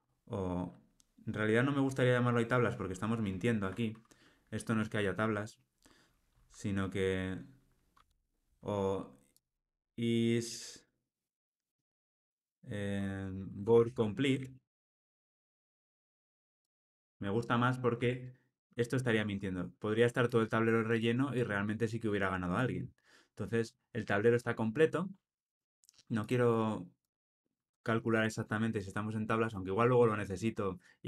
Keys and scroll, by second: 7.9 Tab, 17.0 super+c, 17.9 super+v.